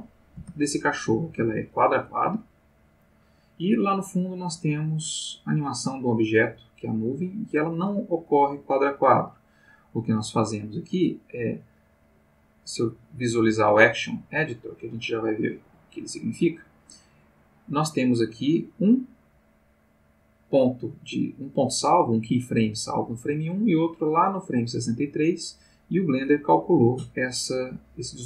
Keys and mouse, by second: 0.3 space, 1.5-3.7 drag, 5.1 click, 8.3-9.7 drag, 10.6-12.8 drag, 14.9-18.7 drag, 24.0 click, 25.0-26.7 drag.